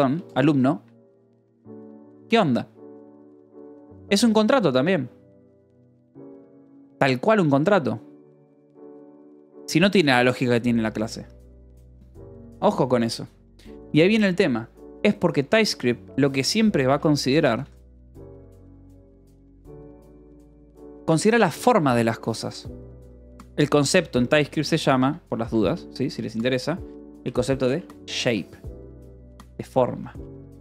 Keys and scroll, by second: 0.0-0.3 typing, 0.7 Escape, 2.1 shift+g, 3.1-6.5 typing, 15.1 k, 16.1-21.4 typing, 16.7 Return, 21.6 Escape, 23.0 k, 23.2 a, 23.7 Escape, 24.5 space, 24.8 a, 25.5 space, 27.0-30.0 typing, 30.2 Escape.